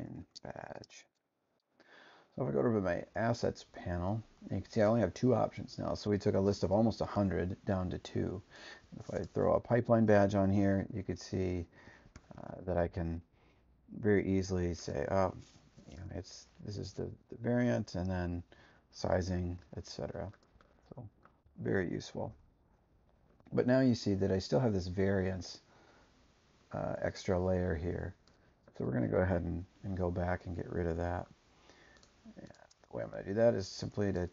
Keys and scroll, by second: 0.0-0.6 typing, 0.8 Return, 12.1 2, 19.3 super+-, 21.4 BackSpace, 22.2 0.